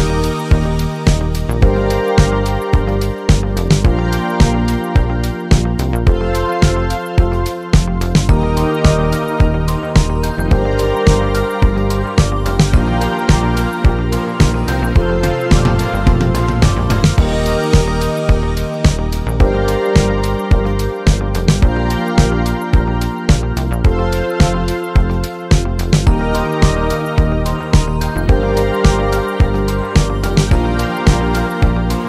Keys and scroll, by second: 8.4 p, 8.9 BackSpace, 10.4-13.7 typing, 17.2-20.2 typing.